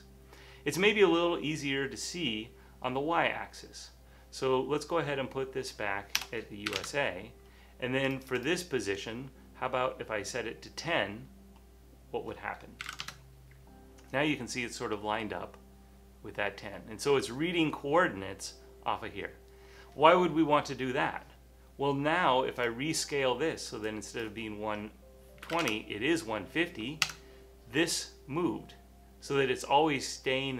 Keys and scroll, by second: 6.3 BackSpace, 6.8 1, 6.8 Tab, 9.9 typing, 12.7-13.5 typing, 25.3-26.1 typing, 27.1 Return, 28.2-30.5 typing.